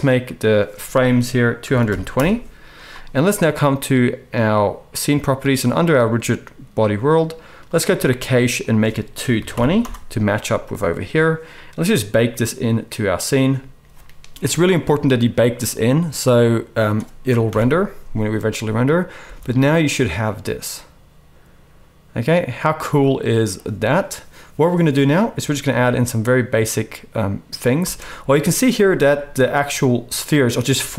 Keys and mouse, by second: 0.4 click, 1.8 2, 5.1-7.7 middle drag, 7.7-30.9 drag, 9.4 2, 17.4 shift+Left, 19.2 space, 27.8 space.